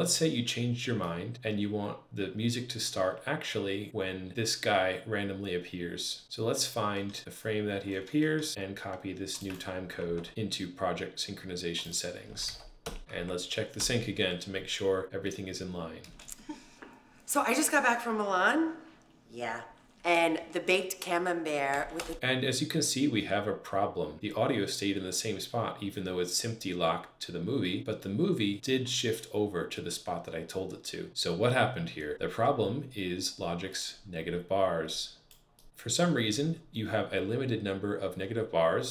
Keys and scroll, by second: 6.2 alt+shift+Left, 7.2 alt+shift+Right, 7.7 alt+shift+Left, 8.5 alt+shift+Right, 9.9 super+c, 12.3 super+v, 12.7 Return, 13.0 super+`, 13.6 Return, 15.9 space, 21.6 space, 21.8 Return.